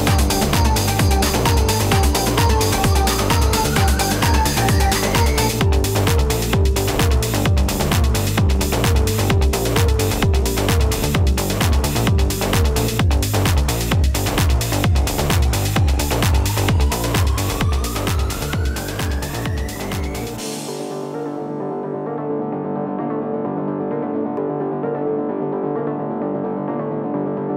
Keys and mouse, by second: 1.0 click, 3.9 space, 4.2 click, 4.4 space, 5.4 click, 10.5 ctrl+-, 12.9 space, 13.0 click, 15.1 space, 15.2 click, 15.3 space, 18.5 -, 23.2 -, 23.4 ctrl+KP_0, 23.7 ctrl+-, 23.9 ctrl+=, 24.2 ctrl+KP_0, 25.7 click, 26.5 ctrl+u.